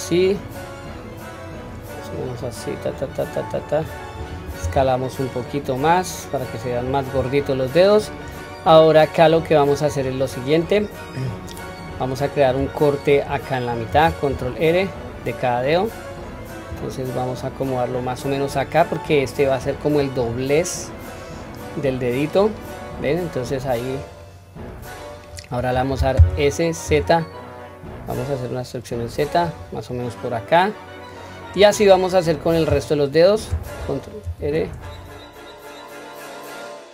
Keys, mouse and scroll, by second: 0.1-1.7 middle drag, 2.3-3.9 drag, 4.6 s, 7.1-7.6 scroll up 1, 8.0-9.8 middle drag, 8.0 scroll up 2, 9.9-10.5 scroll down 2, 10.5-12.0 middle drag, 13.9 ctrl+r, 19.8-24.1 middle drag, 24.2-25.3 middle drag, 26.3 s, 29.9-31.6 middle drag, 35.6 middle click, 35.8 ctrl+r, 35.9 ctrl+z, 36.4 s, 36.6 ctrl+r, 36.6 s, 36.8 scroll down 1, 36.8 middle click.